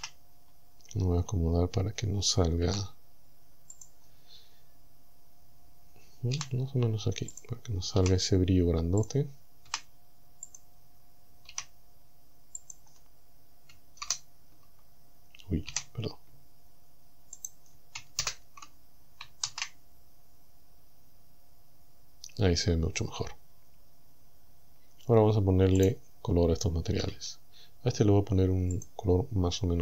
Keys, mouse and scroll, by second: 0.0 z, 0.4 scroll down 1, 1.1 scroll down 1, 2.7 g, 3.8 click, 6.4 g, 7.4 click, 8.0 r, 9.0 click, 9.7 g, 10.5 click, 11.5 r, 12.6 click, 14.0 ctrl+KP_0, 15.7 KP_7, 17.4 right click, 18.2 ctrl+KP_0, 19.5 shift+z, 25.8 right click, 27.1 z, 28.8 click.